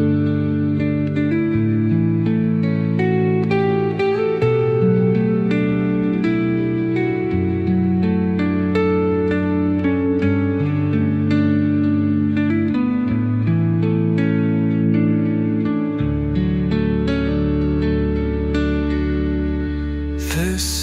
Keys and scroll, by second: 5.0 space, 11.9-13.8 typing, 13.0 Tab, 14.2 Return, 18.0 r.